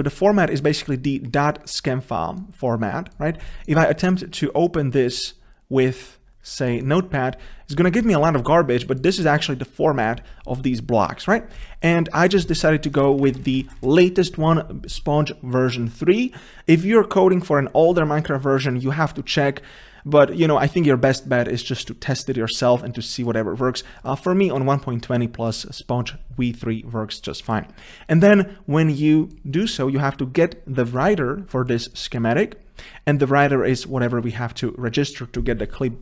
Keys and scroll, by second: 12.6 ctrl+space.